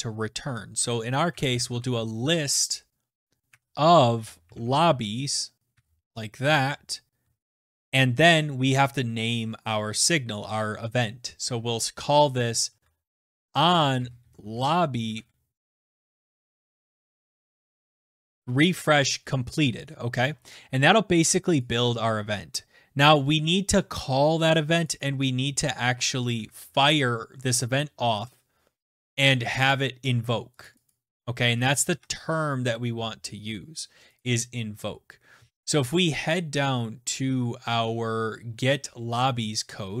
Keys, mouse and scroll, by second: 1.7-2.8 typing, 4.1 Tab, 4.5-8.3 typing, 6.4 Tab, 13.1-18.7 typing, 20.2 scroll, 21.2-22.1 scroll, 22.1 click, 25.5 click, 26.8 ctrl+f, 27.9 Return, 28.3 Return, 31.1 click, 31.4 click, 32.4 ctrl+f, 34.7 click, 36.4-38.4 scroll down 19, 38.4-40.0 scroll.